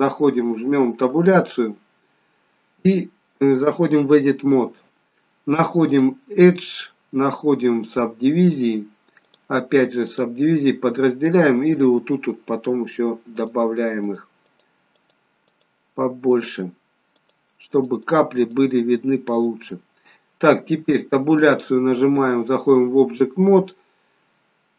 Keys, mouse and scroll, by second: 5.8 click, 9.2 click, 11.7 click, 13.3 click, 13.8 click, 14.0 click, 14.4 click, 14.9 click, 15.4 click, 16.2 click, 17.9 click, 18.4 click, 20.8 Tab, 24.3 middle click.